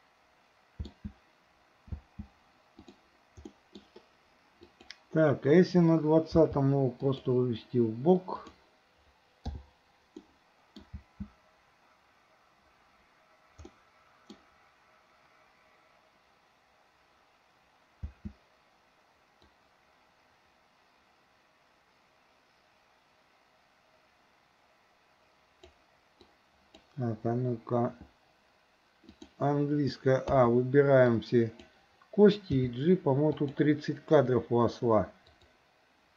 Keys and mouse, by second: 2.0 space, 2.8 click, 3.6 middle drag, 4.8 click, 6.4 g, 8.4 click, 9.6 i, 10.3-10.8 middle drag, 11.0 space, 13.7-14.5 middle drag, 18.1 space, 19.5-25.8 drag, 26.4-27.0 drag, 29.2 click, 30.3 a, 31.1-31.7 drag, 32.5 g, 35.3 click.